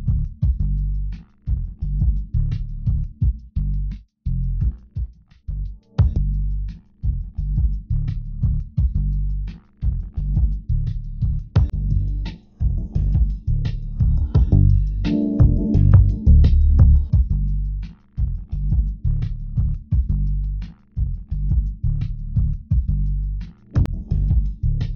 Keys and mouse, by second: 6.5 Tab, 9.9 Tab, 12.2 ctrl+Tab, 15.6 g, 21.5 g.